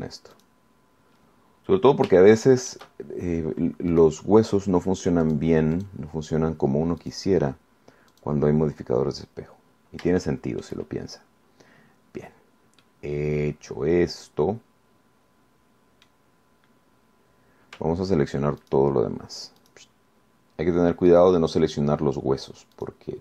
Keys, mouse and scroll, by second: 0.5 click, 1.6 click, 3.4 shift+middle click, 5.2 click, 6.4 click, 7.0 click, 8.2 click, 9.4 click, 10.0 scroll down 2, 11.0-11.3 scroll up 3, 11.4 shift+click, 13.6-14.0 scroll down 2, 14.0-17.5 drag, 17.6-18.0 scroll up 2, 18.2 scroll down 2, 19.8 shift+right click, 20.8 shift+right click, 22.3 shift+right click.